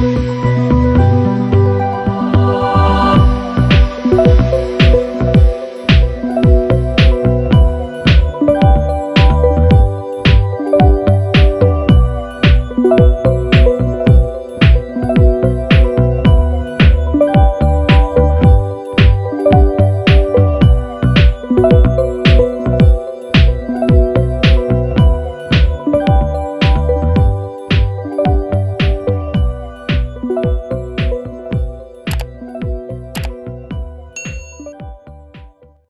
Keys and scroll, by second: 2.4 super+-, 3.2 super+=, 6.0 shift+Down, 7.2 shift+Up, 9.5 Down, 11.8 super+-, 14.8 Up, 21.2 super+=.